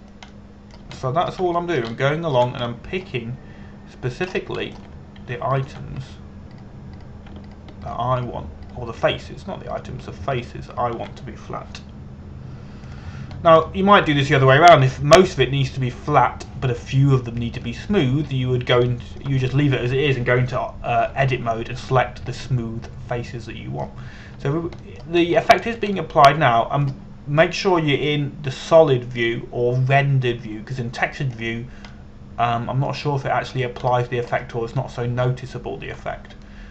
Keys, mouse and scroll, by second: 1.1 click, 1.5 scroll down 1, 2.0 middle click, 2.6 shift+middle click, 3.2 middle click, 3.6 shift+middle click, 4.4 middle click, 5.9 scroll up 1, 6.2 shift+middle click, 7.2 shift+right click, 9.1 shift+right click, 9.9 shift+right click, 10.3 shift+right click, 11.4 shift+right click, 12.0 shift+right click, 12.4 shift+right click, 14.6 click, 15.1 scroll down 1, 15.3 middle click, 16.5 right click, 17.8 click, 18.8 scroll down 1, 19.3 middle click, 20.5 shift+middle click, 24.0 middle click, 26.9 scroll up 1, 27.6 middle click, 29.7 click, 33.6 middle click, 35.5 scroll up 1, 36.0-36.7 scroll down 1.